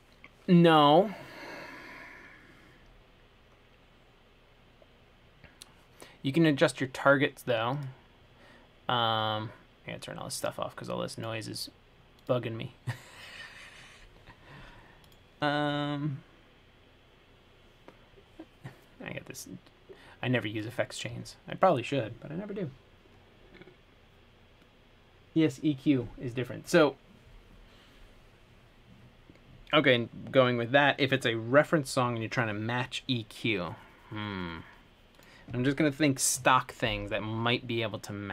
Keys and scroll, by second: 21.3 Escape.